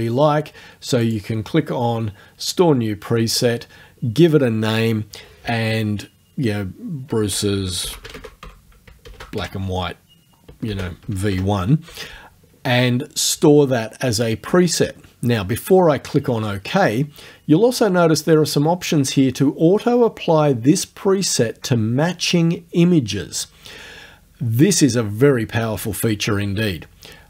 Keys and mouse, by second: 1.0 click, 3.4 click, 7.1-9.4 typing, 10.7 space, 11.0 v, 11.3 1.